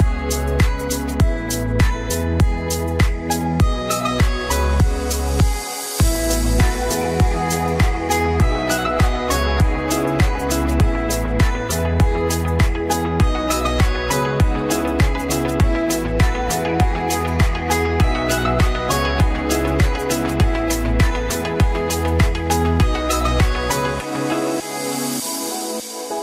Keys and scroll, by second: 1.5 ctrl+d, 19.9 ctrl+d.